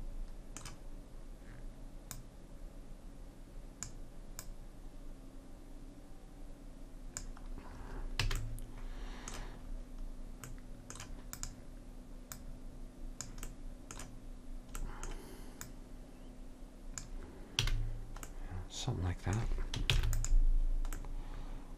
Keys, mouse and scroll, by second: 0.0 middle click, 2.3-4.2 drag, 4.6-6.5 drag, 8.4 a, 11.5-14.4 drag, 14.4 middle click, 15.8-17.7 drag, 17.8 a, 20.1 ctrl+s.